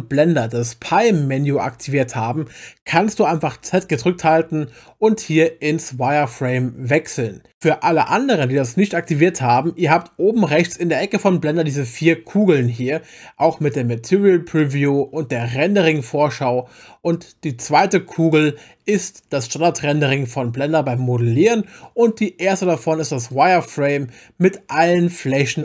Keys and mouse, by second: 3.9 z, 11.6 click, 12.9 click, 17.1 click, 23.3 click.